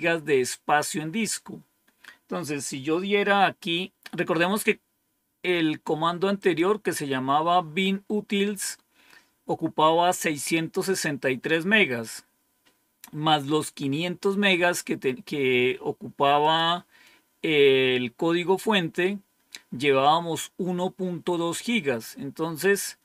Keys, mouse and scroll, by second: 6.3 click, 16.3 click.